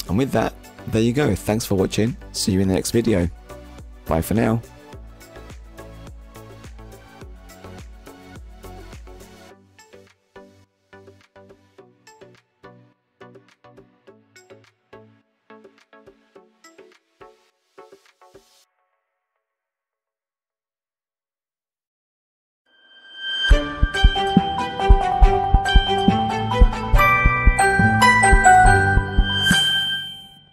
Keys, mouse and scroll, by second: 0.7 click, 1.4 middle click, 2.3 shift+middle click, 2.9 middle click, 5.0 ctrl+s.